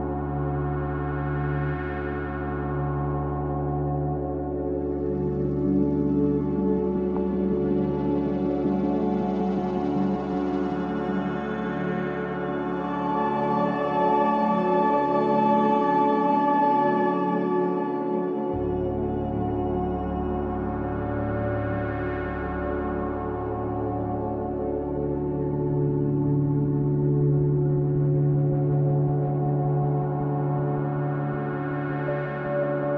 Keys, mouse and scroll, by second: 4.0-8.9 drag, 8.9 KP_0, 11.2-16.0 drag, 17.7 click, 19.8-22.2 scroll down 2, 22.2 click, 24.4 click, 25.9-28.2 drag, 28.2-29.4 scroll down 7, 29.4-32.9 drag.